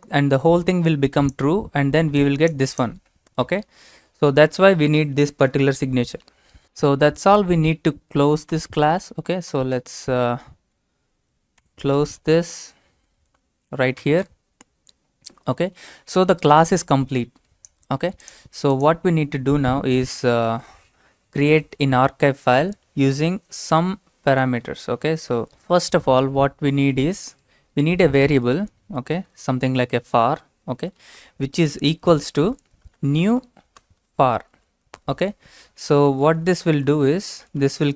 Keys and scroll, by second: 3.9 alt+Tab, 8.5 Return, 9.5 BackSpace, 9.7 BackSpace, 11.6 Tab, 12.4 BackSpace, 14.0 }, 20.2 Return, 21.3 BackSpace, 23.8 Return, 24.5 BackSpace, 28.1-31.0 typing, 32.7-35.0 typing, 36.2-37.9 typing.